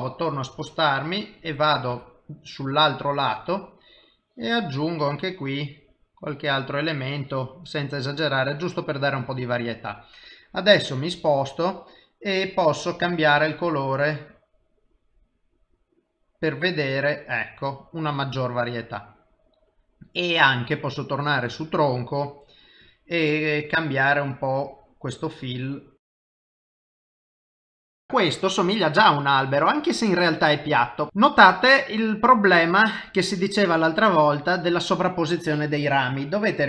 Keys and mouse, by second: 1.1 middle click, 1.9 KP_3, 4.1 click, 5.1 click, 7.1 click, 8.4 click, 9.2 middle click, 12.5 click, 17.6 middle click, 21.5 click, 22.8 click, 27.8 middle click, 30.0 middle click.